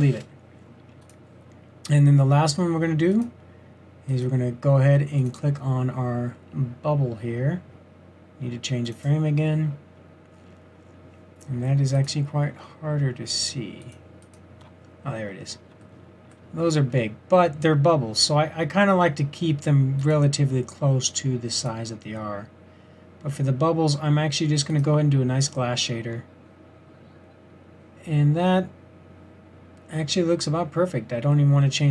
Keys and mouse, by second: 12.5-13.0 middle drag, 18.0 middle click, 20.7-21.1 middle drag, 27.0-27.7 drag.